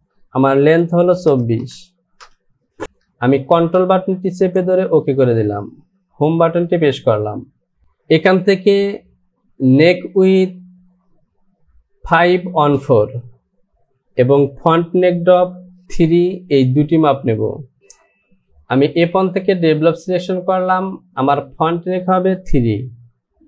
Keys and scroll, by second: 1.6 KP_4, 2.2 e.